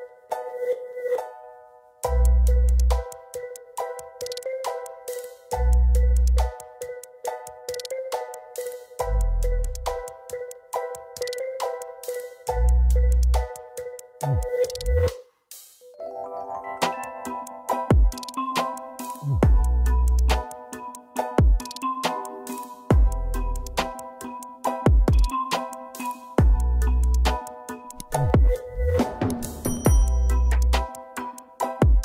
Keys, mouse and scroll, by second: 1.8 double click, 2.7 double click, 2.8 ctrl+space, 3.4 double click, 4.0 right click, 6.6 double click, 7.5 ctrl+alt+click, 8.1 ctrl+alt+click, 13.7 double click, 17.6 double click, 22.6 ctrl+alt+click, 23.8 ctrl+alt+click, 24.9 ctrl+alt+click, 28.1 Right, 28.8 double click, 29.9 Up.